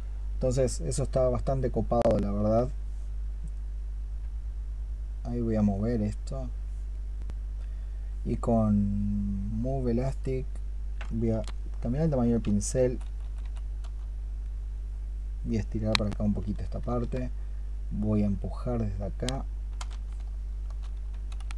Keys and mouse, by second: 11.4 ', 11.9 ', 11.9-19.8 drag, 16.7-19.8 right drag, 20.0-20.6 '.